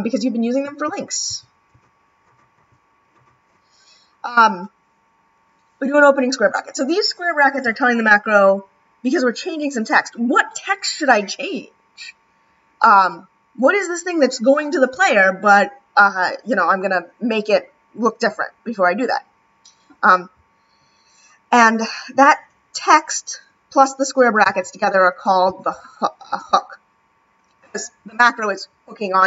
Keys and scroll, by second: 1.3 [, 1.7 ], 2.5 [.